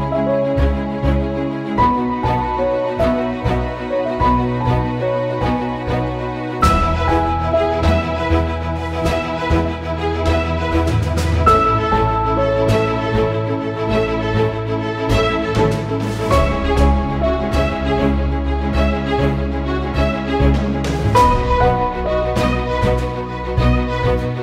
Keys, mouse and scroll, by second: 7.5 shift+click, 10.1 right click, 11.1 click, 15.0 click, 16.3 ctrl+d, 19.8 click, 22.6 click.